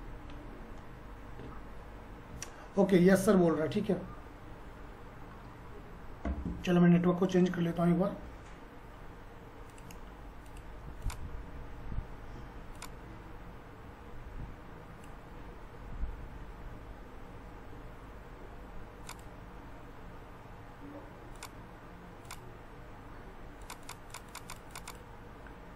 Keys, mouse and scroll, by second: 9.7-16.3 drag, 16.3 scroll up 1.